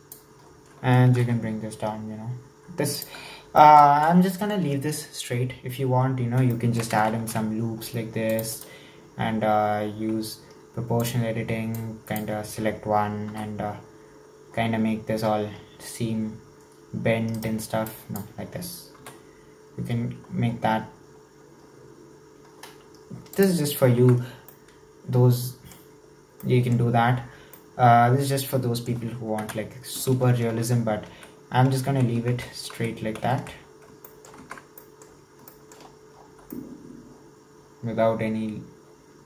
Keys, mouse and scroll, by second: 0.5-1.1 scroll up 2, 1.1 g, 3.3-3.7 scroll down 2, 3.7 shift+middle click, 4.1 scroll down 4, 4.3-5.3 shift+middle drag, 5.3-5.6 scroll down 3, 5.8-6.6 scroll up 3, 6.6 shift+middle click, 7.2 ctrl+r, 11.0 click, 11.8 click, 13.4 g, 17.9-19.0 drag, 19.0 g, 24.0 Tab, 24.2-24.5 scroll down 3, 24.5-29.4 middle drag, 29.4 KP_1, 31.2 ctrl+z, 32.8 ctrl+z, 33.2 ctrl+z, 33.7-34.1 scroll up 3, 34.1 shift+middle click, 34.4 Tab, 34.8 middle click, 35.1-35.5 scroll up 2, 35.5 shift+middle drag, 35.8-36.5 scroll up 5, 36.5-39.2 shift+middle drag.